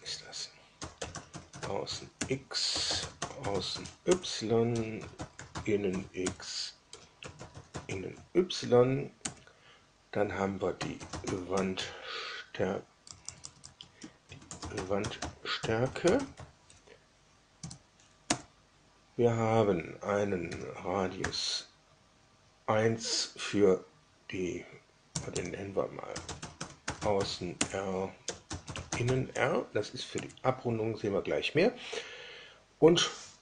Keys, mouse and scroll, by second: 0.4-8.3 typing, 9.2 Down, 10.4-17.5 typing, 18.2 Down, 20.4 r, 21.1 1, 25.0-29.5 typing, 30.1 Down.